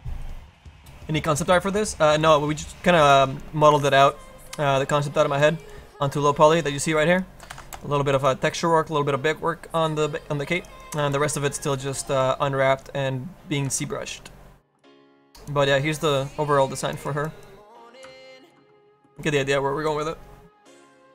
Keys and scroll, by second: 3.3 space, 3.8 F3, 5.0 space, 6.7 space, 7.6 F4, 7.9 space.